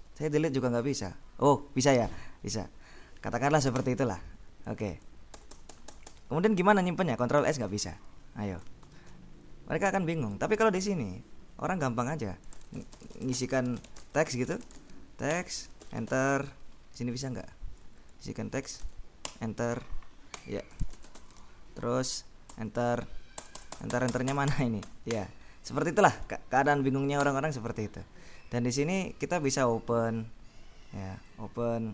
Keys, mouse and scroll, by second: 0.3 Delete, 3.9 Escape, 4.1 Delete, 5.4 BackSpace, 7.5 ctrl+s, 8.9 ctrl+q, 11.2 click, 12.4-17.0 typing, 17.7 click, 18.2 End, 18.4-19.4 typing, 20.4 Escape, 20.6-22.0 typing, 22.7 Return, 23.5 Return, 24.9 Escape, 26.1 click, 27.3 Return, 29.5 click, 31.4 click.